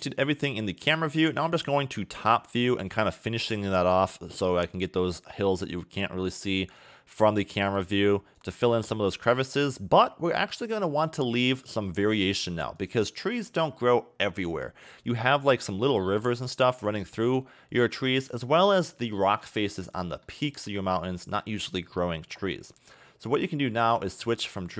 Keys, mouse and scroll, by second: 0.0-0.5 scroll down 2, 0.5 KP_7, 1.1-1.7 scroll down 6, 1.7 shift+middle click, 2.2 scroll up 1, 3.7 click, 11.4 click, 13.6 click, 14.7-15.3 scroll up 3, 15.3 shift+middle click, 16.2-17.9 scroll up 2, 17.9 click, 18.9 scroll up 2, 19.0 shift+middle click, 20.4-23.1 scroll up 3, 24.0 click.